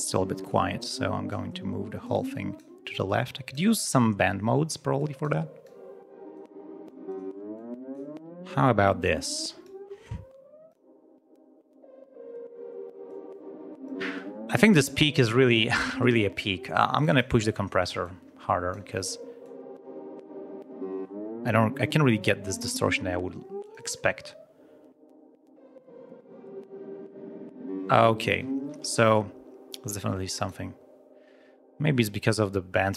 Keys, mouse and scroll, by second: 0.4-1.4 drag, 2.0 click, 3.0 click, 4.9 click, 5.6 click, 6.8 click, 7.5 click, 8.4 click, 9.6-10.8 drag, 13.0 click, 16.9 click, 18.0 click, 19.4 click, 20.9 click, 22.5 click, 23.6 click, 28.7 space, 29.8 click.